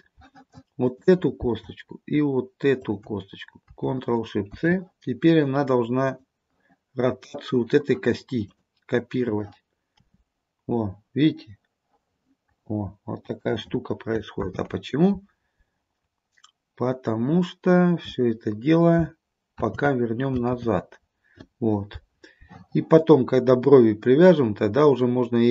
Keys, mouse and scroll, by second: 0.9 click, 2.9 shift+click, 4.6 ctrl+shift+c, 8.5 click, 10.1 r, 14.5 ctrl+z, 16.0-17.6 scroll down 2, 19.7 ctrl+z, 20.6 ctrl+z, 23.9-25.5 scroll up 2.